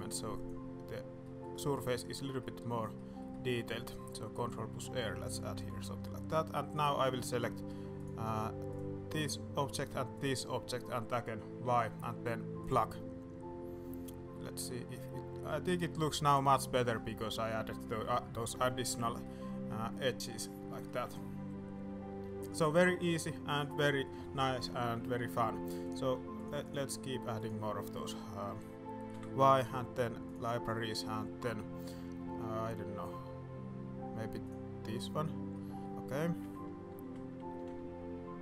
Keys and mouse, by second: 1.2 click, 1.3 click, 1.7 click, 2.4 middle click, 2.9 middle click, 3.3 middle click, 5.0 middle click, 5.5 Tab, 5.8 middle drag, 6.7 click, 7.9 click, 9.6 middle click, 11.6 y, 14.0 middle drag, 14.7 alt+a, 14.8-15.4 middle drag, 15.6-16.4 middle drag, 16.9 middle drag, 17.9 middle drag, 19.2-19.6 middle drag, 20.0 middle click, 20.8 shift+middle drag, 21.1-23.0 middle drag, 23.1-23.5 middle drag, 23.8 middle drag, 24.2 shift+middle click, 24.5 middle drag, 25.0 shift+middle drag, 25.8 click, 26.4 click, 27.1 middle click, 27.4 click, 29.1 y, 35.5-35.8 drag, 35.8 s, 36.4 g.